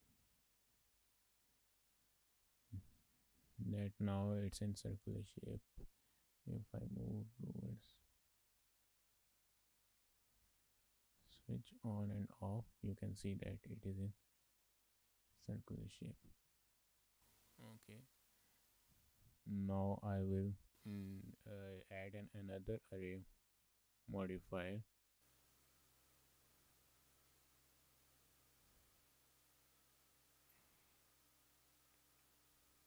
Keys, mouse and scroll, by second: 0.1 click, 1.2 click, 2.3 middle click, 3.0 shift+middle click, 3.2 middle click, 3.8 shift+middle click, 3.9 middle click, 4.5 shift+middle click, 4.8 middle click, 5.8 click, 6.4 scroll up 3, 6.7 shift+middle click, 7.2 click, 7.7 shift+middle click, 8.2-8.5 scroll up 7, 8.7 shift+middle click, 10.7 click, 11.2 click, 11.8 click, 15.7 click, 16.1-16.9 scroll down 10, 16.9 shift+middle click, 17.1 middle click, 17.2 shift+middle click, 18.1 shift+middle click, 18.4 scroll down 3, 18.8 shift+middle click, 23.2 click, 27.2 shift+middle click, 29.0-31.6 scroll down 3, 32.0 click.